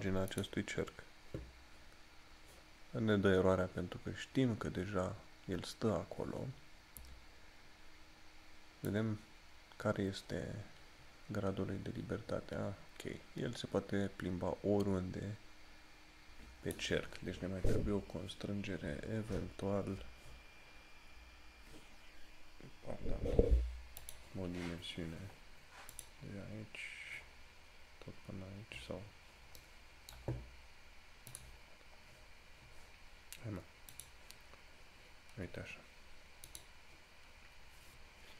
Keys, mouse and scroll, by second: 9.1 click, 18.3 scroll down 1, 24.2 click.